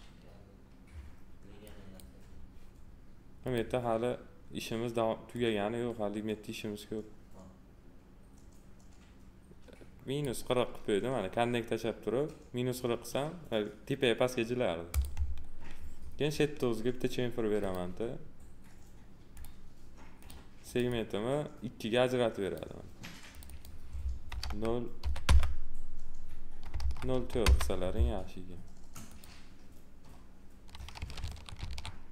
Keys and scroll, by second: 24.3 0, 25.2 Return, 26.7 0, 27.4 Return, 31.2 ctrl+z.